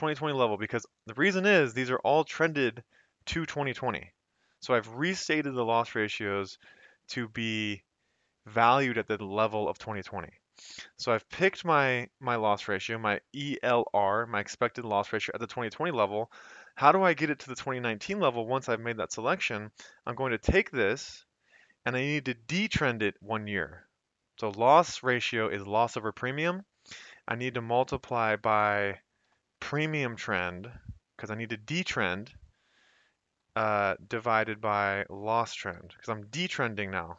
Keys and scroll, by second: 1.3 F2, 4.5 Escape, 20.0 =, 20.5 Up, 28.1 typing, 29.3-30.4 typing, 33.7-36.4 typing.